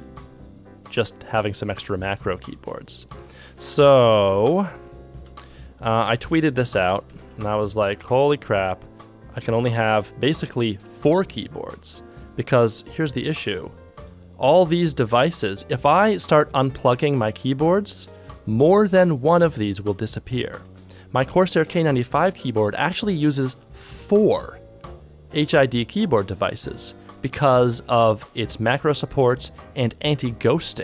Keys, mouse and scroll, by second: 5.2 ctrl+shift+Tab, 7.3 ctrl+shift+Tab, 7.3 ctrl+click, 7.8 ctrl+Tab.